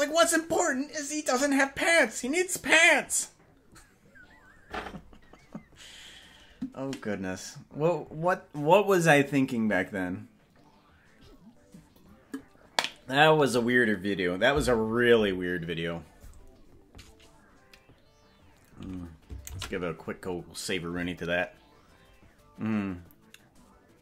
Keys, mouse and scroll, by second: 22.9 ctrl+s.